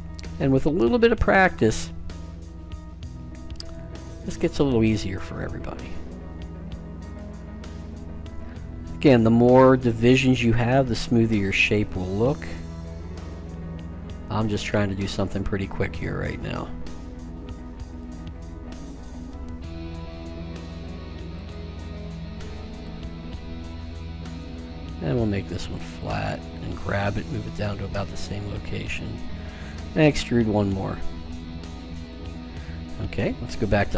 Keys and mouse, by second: 0.4 e, 2.4 r, 4.8 g, 7.8 e, 9.6 r, 12.7 g, 14.9 e, 17.0 r, 19.0 g, 22.0 e, 23.9 r, 26.6 g, 29.4 e.